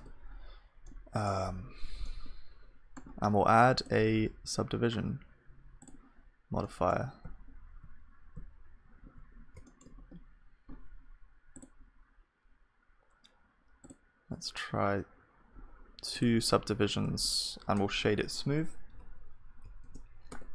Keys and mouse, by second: 6.6-11.7 middle drag, 7.3 z, 8.3 z, 11.7-18.9 drag, 17.0 Tab, 18.9 F3, 20.3 Tab.